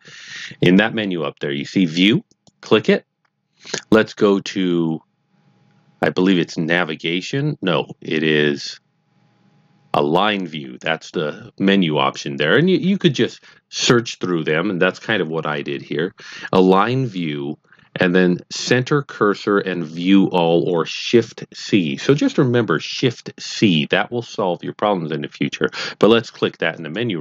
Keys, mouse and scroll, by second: 2.2 click, 26.8 click.